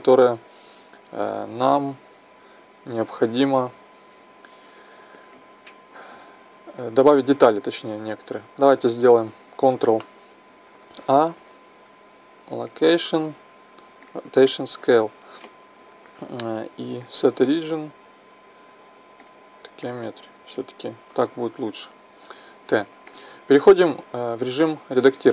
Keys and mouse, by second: 6.8-7.1 middle drag, 8.6 t, 11.0 ctrl+a, 22.2 t.